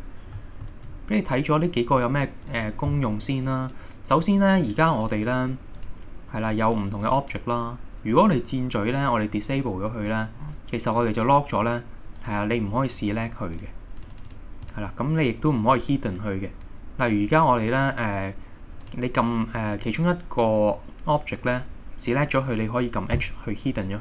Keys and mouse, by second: 2.5 click, 4.3 middle click, 5.1 click, 5.8 click, 11.0 click, 12.9 click, 14.3 click, 18.9 click, 23.2 h.